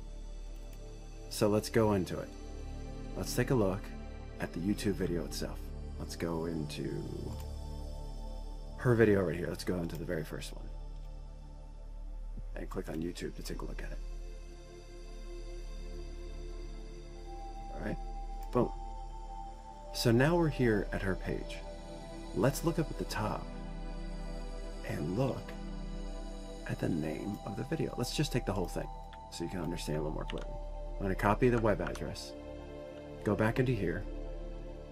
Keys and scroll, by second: 31.0 ctrl+c, 32.5 alt+Tab.